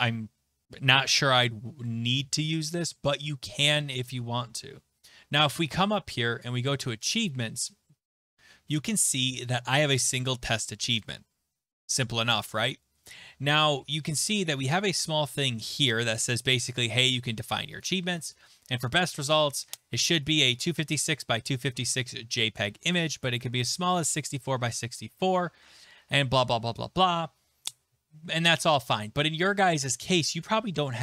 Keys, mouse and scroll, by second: 5.8 click, 7.1 click, 17.4 click, 17.8 click, 19.9 click, 20.3 click, 22.9 click, 23.2 click, 24.8 click, 29.2 click.